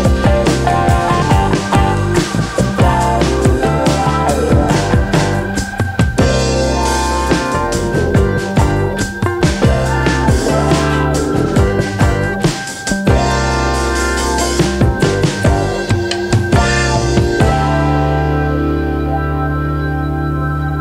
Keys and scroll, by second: 2.3 v.